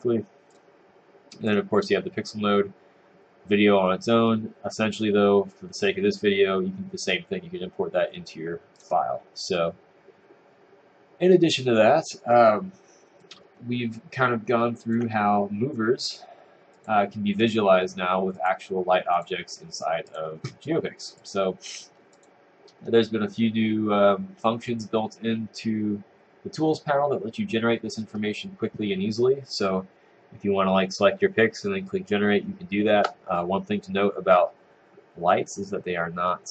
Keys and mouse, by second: 13.2 click, 16.9 click, 17.4 click, 18.6 click, 19.3 click.